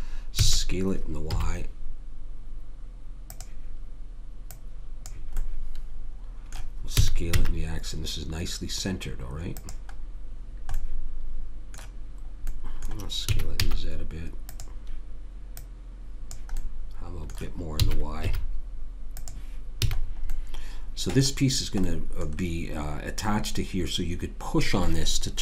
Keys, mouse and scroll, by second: 0.4 s, 4.5 click, 6.9 s, 10.3-13.2 middle drag, 13.2 s, 15.5 click, 17.8 s, 19.8 a, 20.0-21.9 middle drag.